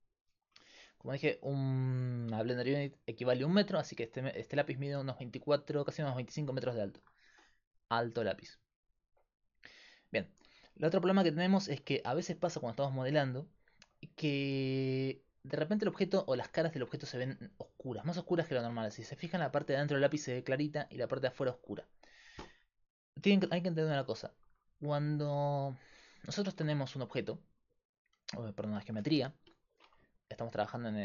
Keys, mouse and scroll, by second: 24.7-26.5 right drag, 25.6 click, 26.5 shift+a, 27.7 click, 29.4 KP_Decimal.